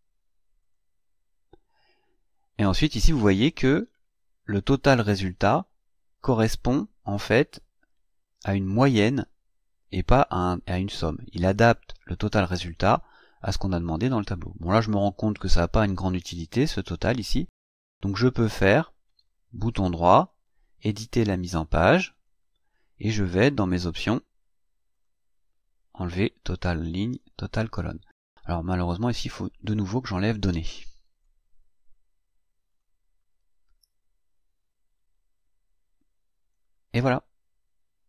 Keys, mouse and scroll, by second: 0.6 click, 19.1 right click, 22.1 click, 24.9 click, 26.2 click, 27.2 click, 28.9 click, 30.9 Delete, 32.6 click, 34.2-34.6 scroll down 1, 36.4 click.